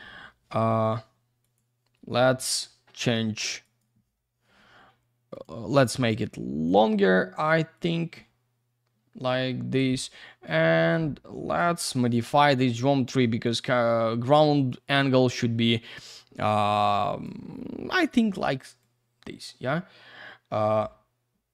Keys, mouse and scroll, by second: 0.2 F3, 1.4 click, 2.6 F2, 3.6 click, 5.3 click, 6.6 click, 7.7 click, 10.0 F2, 11.4 click, 12.2 click, 13.4 click, 14.7 click, 18.8 shift+click.